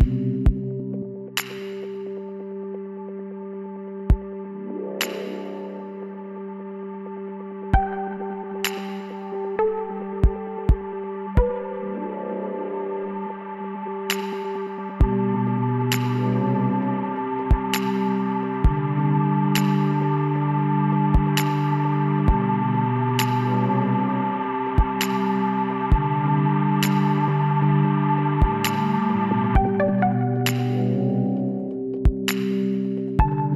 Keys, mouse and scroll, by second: 0.9 c, 7.7-10.2 middle drag, 10.2 s, 18.5-19.7 middle drag, 19.8-21.9 middle drag, 22.3 KP_1, 23.6 z, 24.0 middle click, 24.5 middle click, 25.2 middle click, 27.1-28.5 middle drag, 28.5 Tab, 30.4 middle click, 31.3 middle click.